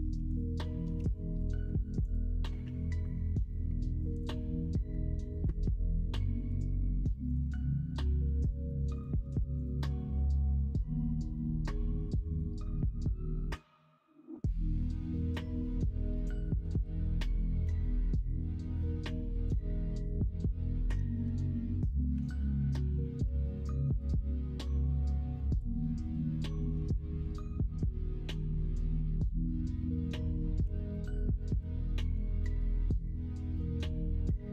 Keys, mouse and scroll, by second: 22.2 Tab, 23.3 ctrl+s, 30.6 g, 32.1 s, 33.5 g.